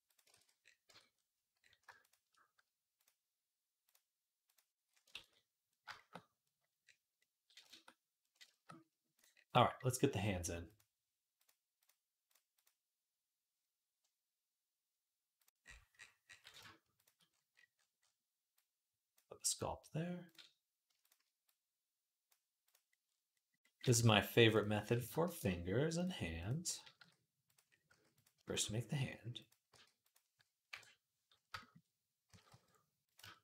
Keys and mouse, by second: 0.0-1.7 ctrl+drag, 0.1 ctrl+z, 0.7 Tab, 1.7 shift+middle click, 2.1-3.2 drag, 3.2 middle click, 3.7-5.5 drag, 5.0 ctrl+s, 5.5-9.0 shift+drag, 9.0-10.4 middle drag, 10.4 click, 10.6 middle click, 11.2 click, 11.3 middle click, 11.6 click, 11.7 middle click, 12.1 click, 12.4-15.2 middle drag, 15.2 click, 15.3-16.8 middle drag, 16.8 shift+click, 16.9-18.3 middle drag, 18.3 click, 18.9-23.9 middle drag, 21.3 click, 25.0 shift+a, 26.8 s, 27.7 s, 28.8 s, 29.5 g, 30.5 KP_1, 31.3-33.4 shift+middle drag, 32.1 s.